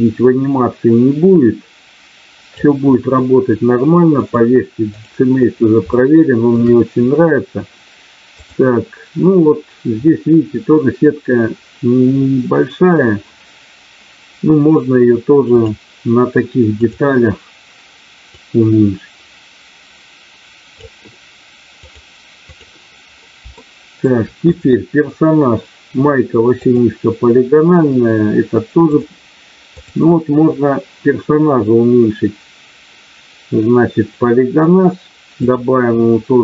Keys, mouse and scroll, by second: 4.2 click, 6.0 shift+middle click, 8.5 click, 15.7-17.0 drag, 18.2-21.0 drag, 21.8 click, 23.6 shift+middle click, 24.6 click, 26.7 click, 28.8 click, 35.4-36.4 drag.